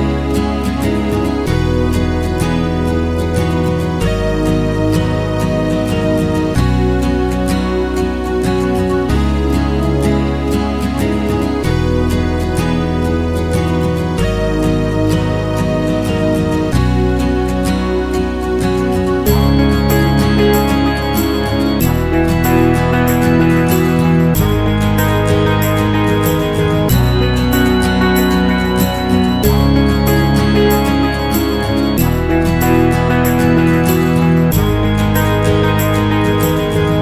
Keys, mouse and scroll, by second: 2.4 alt+middle click, 2.5 alt+click, 2.7 alt+middle click, 2.9 alt+right click, 3.2-6.1 alt+drag, 6.1 alt+middle click, 6.3-9.2 drag, 9.2 alt+middle click, 9.5 alt+click, 9.6 alt+middle click, 9.8 alt+click, 9.9 alt+right click, 10.1-15.2 drag, 15.2 alt+middle click, 15.3 alt+click, 15.5 alt+right click, 15.7-18.1 drag, 18.1 alt+middle click, 18.2-20.0 alt+drag, 20.0 alt+middle click, 20.2 click, 21.1 alt+middle click, 21.4 click, 22.0 alt+middle click, 22.2 f, 22.4 click, 23.0 alt+middle click, 23.1-24.2 alt+drag, 24.2 alt+right click, 24.4 alt+click, 24.6 alt+middle click, 24.9 alt+click, 25.4 alt+right click, 25.6 click, 25.9 ctrl+z, 26.2 click, 26.4 ctrl+z, 26.9 click, 27.2 ctrl+z, 27.3 alt+right click, 27.5 alt+middle click, 27.9 right click, 28.2 click, 28.5 ctrl+z, 28.7-31.0 drag, 31.0 ctrl+z, 31.0 ctrl+z, 31.2-33.1 drag, 33.1 alt+middle click, 33.2-34.4 alt+drag, 34.4 alt+middle click, 34.5 alt+click, 34.6 f, 34.8-37.0 shift+drag.